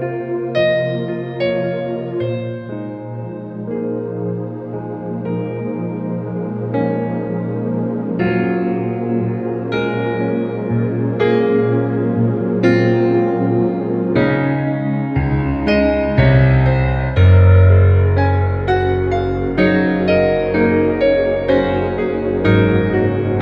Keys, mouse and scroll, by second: 0.1-0.8 click, 1.5-2.2 ctrl+drag, 2.9-3.3 click, 4.9 ctrl+[, 7.4 click, 9.0 ctrl+click, 9.4 ctrl+g, 10.0 click, 12.7 space, 12.9 click, 13.0 space, 13.5 ctrl+=, 14.5 click, 16.7 click, 18.5 click, 23.2 Down.